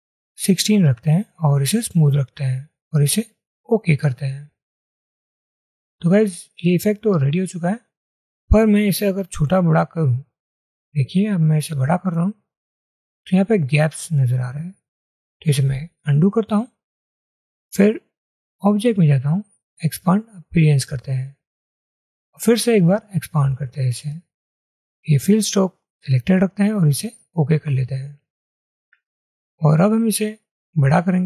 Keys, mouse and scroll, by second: 0.1-3.0 scroll up 1, 10.9 shift+click, 15.5 ctrl+z.